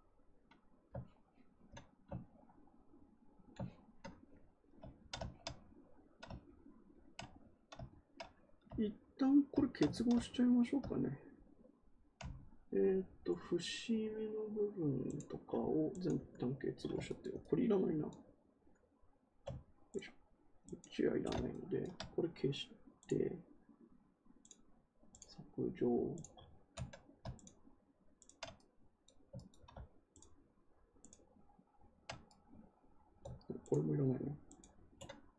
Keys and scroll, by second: 9.8 ctrl+z.